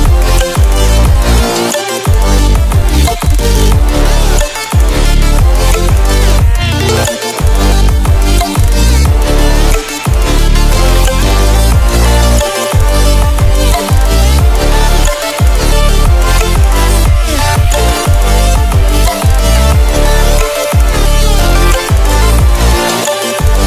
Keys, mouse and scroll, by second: 3.9 typing, 7.8 ctrl+w, 13.4 ctrl+w, 15.5 click, 19.6 ctrl+w, 21.2 ctrl+w, 22.2-23.6 drag.